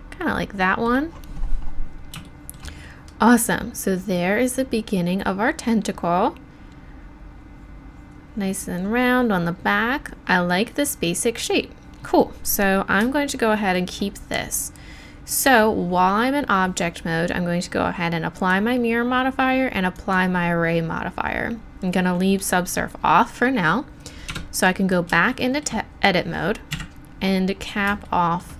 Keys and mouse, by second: 24.3 Tab, 26.7 KP_1.